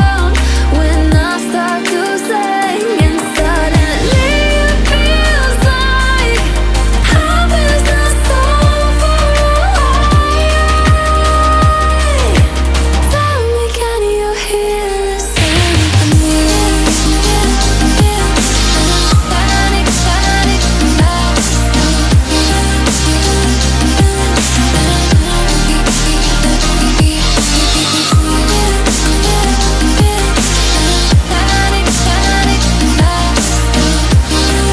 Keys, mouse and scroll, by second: 0.9-1.3 alt+scroll down 1, 1.3 alt+scroll up 1, 3.1 alt+scroll down 1, 3.7 alt+scroll up 1, 5.6 click, 7.9 click, 9.9-10.2 alt+scroll up 1, 10.2 alt+scroll down 1, 10.5 click, 10.9 F7, 11.4-11.7 alt+scroll up 1, 12.0 click, 13.2-16.6 typing, 16.7-17.1 alt+scroll up 1, 17.1 click, 17.5 Return, 18.1-21.0 drag, 21.0 alt+scroll down 1, 21.2 alt+scroll up 1, 21.4 click, 21.9 alt+scroll up 2, 22.1 click, 23.0 alt+scroll up 2, 23.4-24.9 shift+drag, 25.0 click, 25.6 alt+scroll down 2, 25.8-26.6 alt+scroll up 2, 28.2 alt+click, 32.2 alt+scroll down 1, 32.4 alt+scroll up 1, 32.8 click, 33.4-34.7 shift+drag.